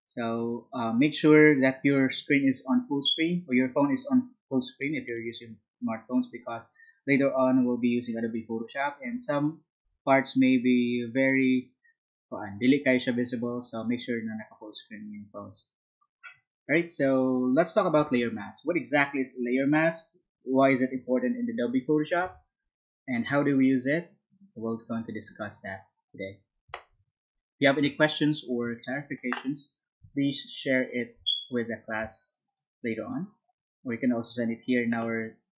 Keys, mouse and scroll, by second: 26.7 Down.